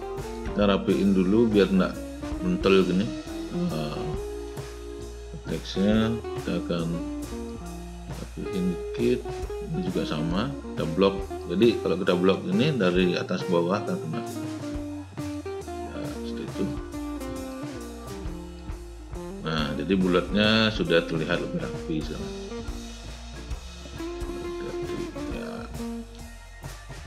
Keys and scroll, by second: 6.4 w.